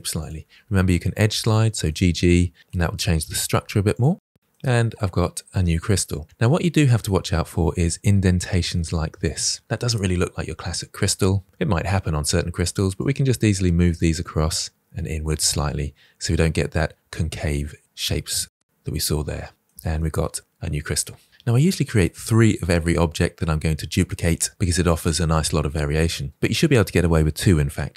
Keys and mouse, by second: 0.0-4.9 typing, 0.0 click, 0.4 click, 0.5 click, 0.7 click, 0.9 click, 1.5 click, 2.0 click, 2.3 shift+middle click, 2.4 click, 3.0 click, 3.3 click, 3.6 click, 4.2 click, 4.4 click, 5.3 middle click, 5.4 Tab, 5.6-6.2 middle drag, 6.6 shift+middle drag, 7.6 shift+middle drag, 8.0-9.3 middle drag, 11.2 Tab, 12.4 click, 13.7 middle click, 14.6 g, 15.4 click, 15.7 middle click, 16.8-19.3 middle drag, 19.5 middle click, 19.6 Tab, 19.9-20.3 middle drag.